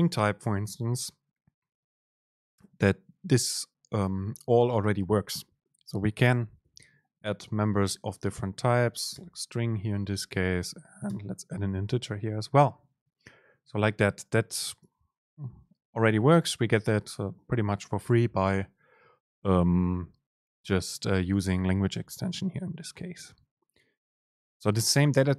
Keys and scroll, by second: 7.4 super+space, 9.5 Up, 9.9 super+space.